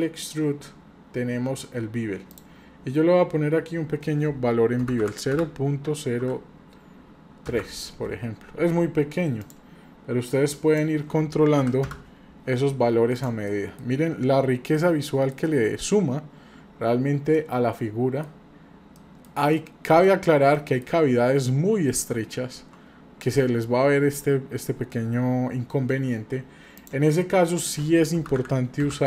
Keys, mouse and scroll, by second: 2.3-8.7 drag, 2.3-2.8 scroll down 1, 9.4-12.6 drag, 13.2 click, 13.5 middle click, 13.5 scroll down 1, 13.9 scroll up 2, 14.7 middle click, 16.1-16.6 scroll up 2, 17.3-18.2 middle drag, 18.5 scroll down 1, 18.9 middle click, 19.5 shift+middle click, 20.5-20.8 shift+middle drag, 21.0-21.9 scroll up 5, 22.7 scroll down 1, 26.8-29.0 drag.